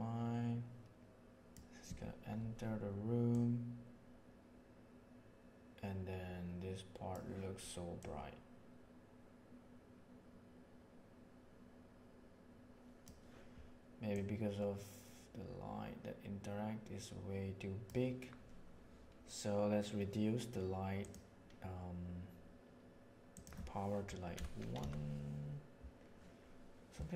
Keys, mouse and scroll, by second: 3.2-7.0 drag, 14.0-17.8 drag, 20.9 click, 23.3-26.1 drag.